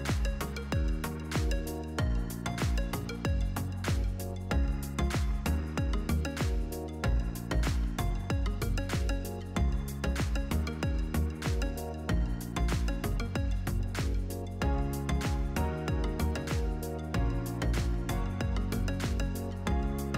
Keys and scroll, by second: 0.9 8, 1.7 Return, 5.3 Delete, 6.8 1, 7.1 Tab, 7.2 1, 7.5 Return, 9.1 1, 10.1 Return.